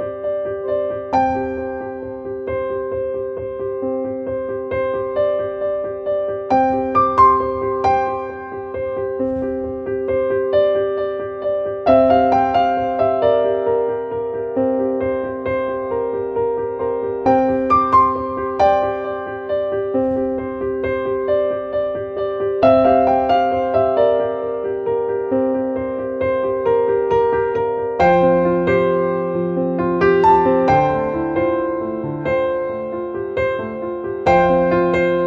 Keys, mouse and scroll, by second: 6.2 click, 6.4 click, 7.3 click, 8.2-11.8 drag, 12.1-13.1 drag, 13.1-13.5 scroll down 1, 13.5-16.1 drag, 16.1 click, 17.4-19.1 drag, 19.1-19.6 scroll down 1, 20.8-28.0 drag, 31.1-32.8 drag, 34.3 right click, 34.6 click.